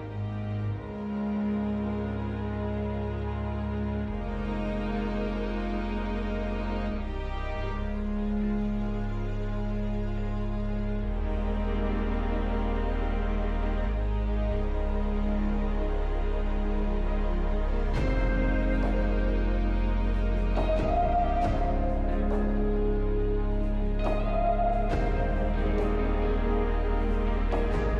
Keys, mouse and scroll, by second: 1.4 double click, 1.9-3.0 typing, 2.1 double click, 23.0-23.9 typing, 24.0 Return, 25.0 scroll up 1.